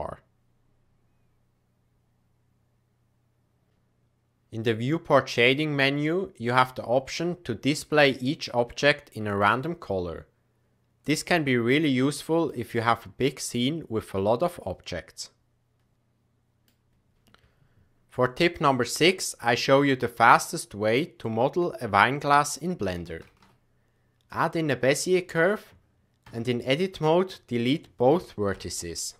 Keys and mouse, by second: 5.3-10.6 drag, 12.3 shift+middle click, 12.8-16.7 middle drag, 17.1 t, 23.2 shift+a, 26.2 Tab, 26.9 click, 28.5 Delete.